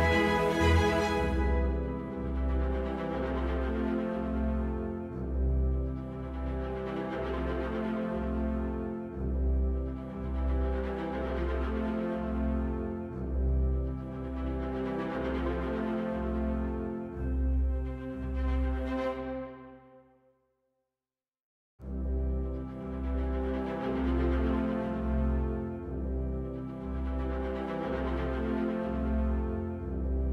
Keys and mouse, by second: 4.6-19.2 middle drag, 19.2 right click, 20.1 shift+a.